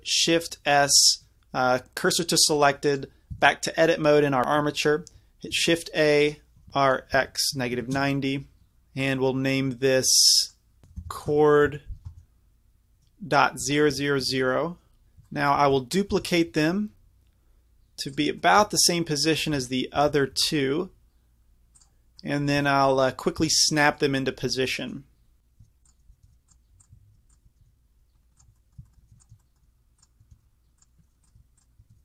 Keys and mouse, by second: 0.9 shift+s, 2.9-4.4 drag, 3.4 Tab, 5.6 shift+a, 6.7 ctrl+z, 8.0 r, 9.0-10.8 drag, 10.8 BackSpace, 13.9 KP_0, 15.4 middle click, 16.2 shift+d, 19.3-20.7 middle drag, 20.0 shift+d, 23.2-25.6 middle drag, 25.6 Tab, 25.9-26.8 drag, 26.3 shift+s, 27.0 Tab, 27.6 shift+s, 29.2 Tab, 30.3 shift+s, 31.2-32.0 drag, 31.4 Tab, 31.9 shift+s.